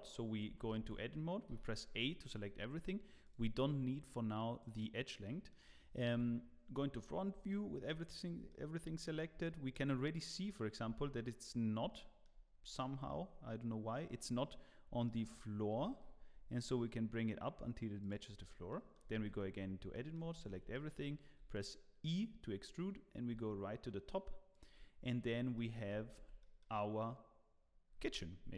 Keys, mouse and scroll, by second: 0.4 Tab, 0.8 Tab, 1.5-2.0 scroll down 1, 1.5 a, 3.2 click, 5.2 middle click, 6.1 KP_1, 6.9-7.3 scroll up 3, 7.5 shift+middle click, 8.0 scroll up 2, 8.5 shift+middle click, 9.0 scroll up 2, 9.4 shift+middle click, 10.3 scroll up 2, 10.8 Tab, 11.9 shift+middle click, 13.1 z, 15.0 shift+middle click, 15.7 g, 18.3 scroll down 3, 18.7 shift+middle click, 19.1 Tab, 19.6 scroll down 2, 19.9 shift+middle click, 20.3 a, 20.7 shift+middle click, 21.4 e, 25.2 z, 26.1 middle click, 26.1-26.7 scroll down 6, 26.1 z, 26.1 Tab, 26.4 middle click.